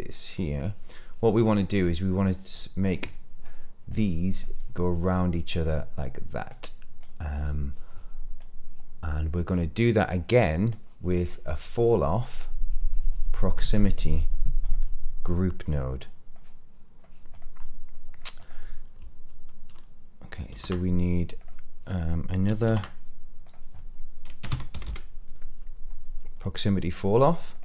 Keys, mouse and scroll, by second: 0.9-1.6 middle drag, 2.5-2.8 middle drag, 3.8 click, 4.4 click, 5.6 click, 6.9 click, 8.3-8.8 drag, 9.4-10.6 drag, 11.1-13.8 drag, 14.6 click, 16.3-17.0 drag, 17.3 click, 17.5 middle click, 18.3 click, 20.4 shift+a, 21.3 click, 21.9 click, 22.6 shift+a, 24.8 l.